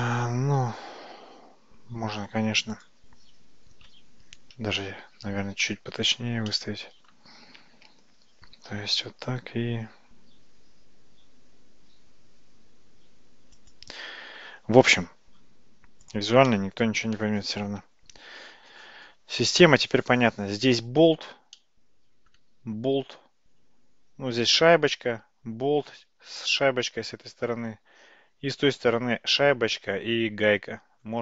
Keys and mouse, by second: 1.1 `, 4.9-5.7 shift+middle drag, 6.5-7.1 shift+middle drag, 8.6 g, 16.5-17.1 middle drag, 21.6-22.4 middle drag.